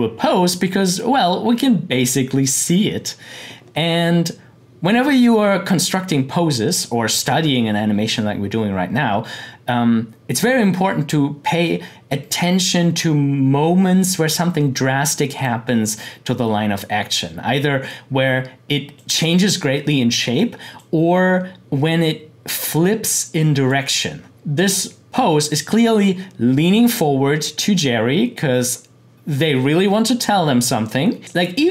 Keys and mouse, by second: 4.9 click, 6.0-9.3 drag, 15.4-24.3 drag, 31.2-31.7 drag.